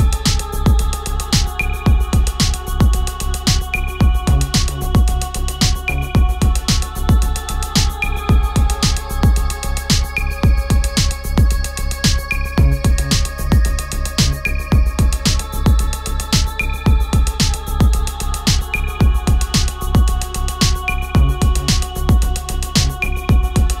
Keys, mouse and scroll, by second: 4.1 click, 10.3-11.5 drag, 11.5 shift+s, 12.7-13.7 typing, 14.7 click.